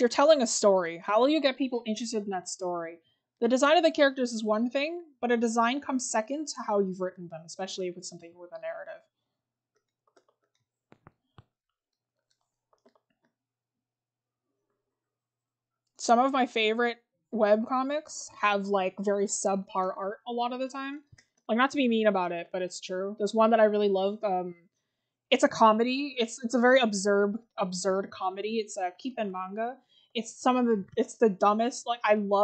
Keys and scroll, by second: 18.0 scroll down 1, 19.2-19.6 scroll up 1.